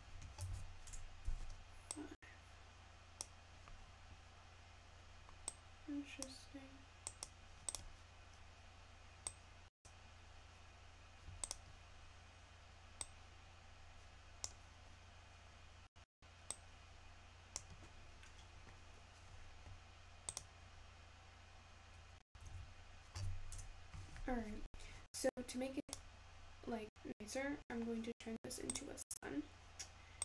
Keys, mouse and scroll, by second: 26.9 click.